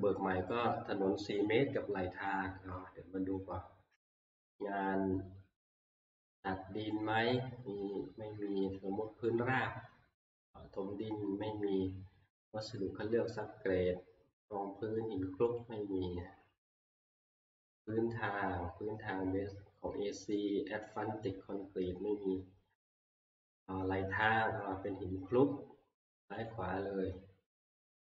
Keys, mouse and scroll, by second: 1.9-7.0 scroll down 1, 15.6 click, 17.0 click, 20.7 middle click, 26.5 click, 27.8 click.